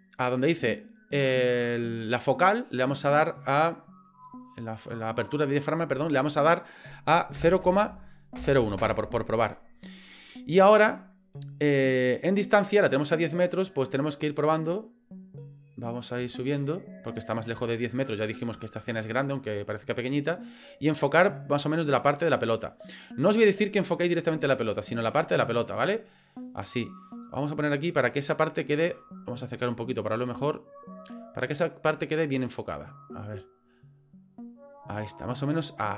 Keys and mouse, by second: 2.8 click, 13.0-23.3 drag, 25.1-27.4 drag, 31.7 click.